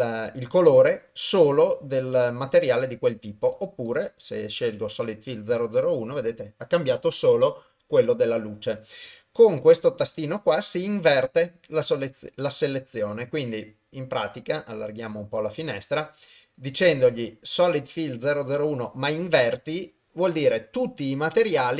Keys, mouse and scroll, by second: 0.9-2.3 drag, 3.4 click, 3.9-5.3 drag, 11.1 click, 15.2-16.7 drag.